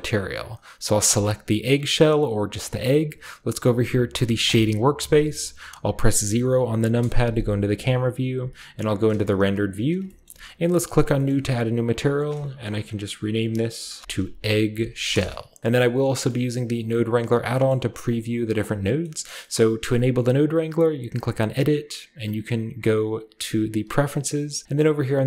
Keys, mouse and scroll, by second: 1.0-2.6 right drag, 4.4-6.8 drag, 6.8 KP_0, 7.8-8.3 scroll up 1, 8.3-9.0 z, 10.2 shift+middle click, 10.8 click, 11.2-12.1 scroll up 1, 12.1 click, 12.1 middle click, 12.1-13.2 scroll up 1, 13.7 shift+click, 13.7-15.8 typing, 15.7 middle click, 15.8-17.0 scroll up 1, 17.0-18.5 drag, 17.0-18.7 scroll up 1, 18.5 middle click, 18.7 scroll down 1, 21.1 click, 23.1 click, 23.8 click, 24.6 click, 24.6 typing.